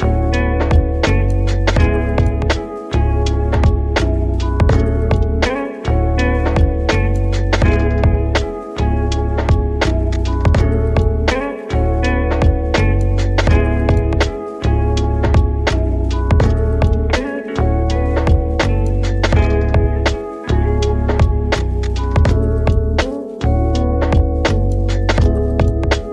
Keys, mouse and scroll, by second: 0.2 click, 1.2 middle click, 1.8 a, 2.6 e, 3.3 click, 4.6 click, 5.3 middle click, 5.7 ctrl+b, 7.4 click, 8.8 middle click, 9.3 click, 10.3 s, 11.6-13.9 middle drag, 13.9 ctrl+r, 15.1 click, 15.8 click, 17.3 click, 18.3 click, 20.0-22.7 drag, 22.7 Tab, 22.8-23.7 right drag, 23.7 middle click, 24.1 Tab, 24.2 scroll up 2, 25.2-26.1 middle drag.